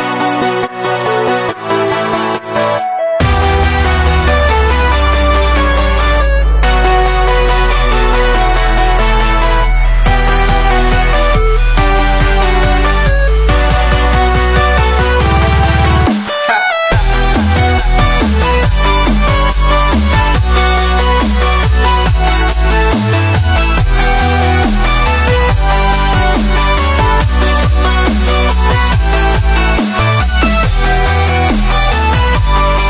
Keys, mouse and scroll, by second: 0.4 shift+click, 0.6 shift+click, 1.0 shift+click, 1.5 shift+click, 1.7 scroll down 2, 1.9-2.9 middle drag, 2.9 shift+d, 3.8 p, 4.5 Tab, 5.1 click, 6.1 Tab, 6.6 a, 7.1 e, 8.6 Tab, 8.8 click, 9.4-11.7 drag, 12.3 click, 12.5 Tab, 12.7 drag, 13.0 middle drag, 13.3 scroll up 4, 13.5 scroll down 1, 13.8 shift+middle drag, 14.0 click, 14.3 scroll up 1, 14.6-15.3 middle drag, 15.3-15.9 scroll down 5, 15.4 middle drag, 15.9-17.2 middle drag, 17.2-19.2 drag, 19.3 shift+click, 20.4 click, 20.8 middle click, 21.8 scroll up 2, 21.9 shift+middle click, 22.4-24.1 middle drag, 24.7-25.1 scroll down 4, 25.1 shift+middle click, 25.3-26.9 scroll up 1, 27.6-29.5 drag, 29.7-31.4 drag, 32.7-32.8 scroll down 3.